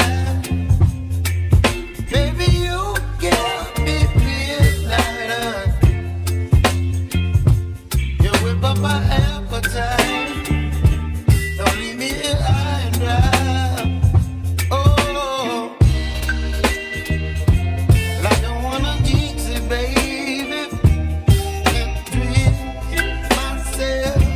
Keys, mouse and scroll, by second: 1.4-3.8 shift+middle drag, 3.8-4.4 scroll down 2, 4.4-6.4 shift+middle drag, 6.4 ctrl+r, 7.6 ctrl+r, 10.0 ctrl+b, 15.5 click, 16.0-18.5 middle drag, 19.5 3, 19.6 click, 20.9-23.4 middle drag, 23.6 `.